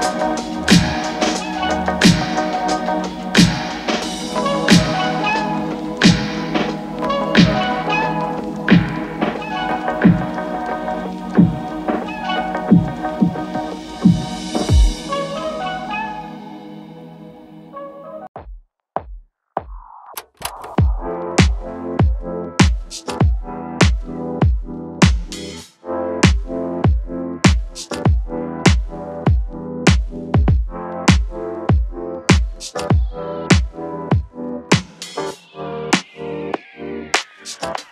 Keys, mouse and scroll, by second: 1.4 click, 3.2 Return, 4.2-6.3 typing, 6.5 Return, 7.9 click, 11.1 u, 12.1 click, 12.6 scroll down 1, 12.9 scroll up 1, 13.0 scroll down 1, 13.8-14.3 scroll down 2, 15.0 scroll down 1, 16.6 shift+click, 22.7 scroll up 1, 23.6 scroll down 1, 24.0 scroll up 1, 26.3 click, 28.2 ctrl+space, 28.7-31.4 typing, 32.9-37.9 drag, 32.9 typing.